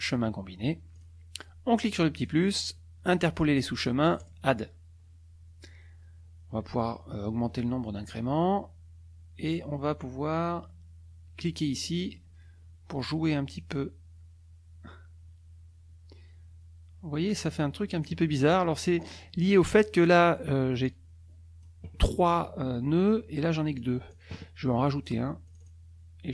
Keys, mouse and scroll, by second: 0.0 click, 0.9 click, 2.3 click, 4.2 click, 7.4-7.7 scroll up 1, 8.0-8.3 scroll up 1, 12.1 click, 13.5-18.2 drag, 19.0 click, 20.8 click, 23.8 click, 25.5 click.